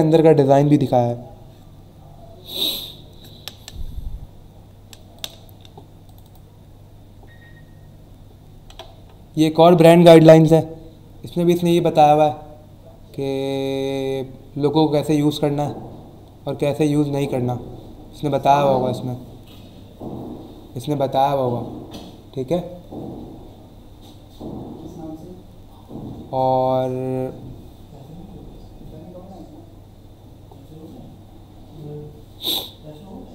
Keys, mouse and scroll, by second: 4.1-4.8 scroll down 2, 5.1 click, 6.0 click, 8.5-8.8 scroll down 1, 9.0-9.4 scroll down 1, 10.2-13.2 scroll down 6, 15.3 scroll up 1, 15.9 scroll down 1, 16.6 scroll down 1, 17.6 scroll down 1, 18.4-19.1 scroll down 2, 20.0-21.2 scroll down 3, 23.6-24.6 scroll down 3, 26.0 scroll up 1, 26.7-27.5 scroll down 2, 27.9 scroll down 1, 29.5 scroll up 1, 30.5 scroll up 1, 32.8-33.3 scroll up 1.